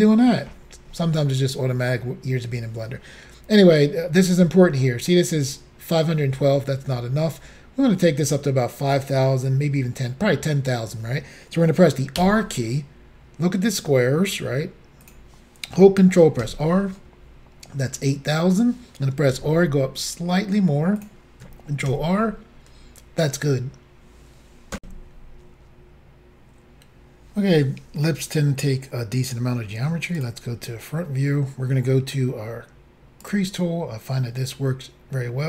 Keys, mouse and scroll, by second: 12.3 r, 15.1 click, 16.6 ctrl+r, 19.4 r, 21.1 click, 22.0 ctrl+r, 24.8 Insert, 30.2 click, 30.2 click, 30.9 scroll up 2, 33.2 click.